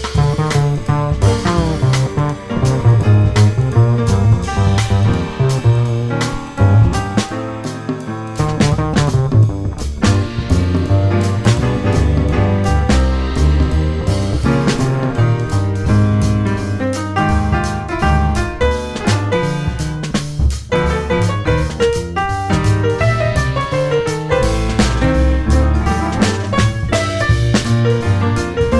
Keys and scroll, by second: 0.6 F4, 2.5 F4, 3.3 1, 3.4 F4, 5.2 alt+c, 19.8 ctrl+shift+e, 20.1 1, 20.7 F4, 21.4 F4, 22.4 1, 22.5 F4, 23.8 ctrl+shift+e, 24.9 ctrl+shift+e, 26.2 1, 26.8 F4, 27.7 F4, 28.5 F4.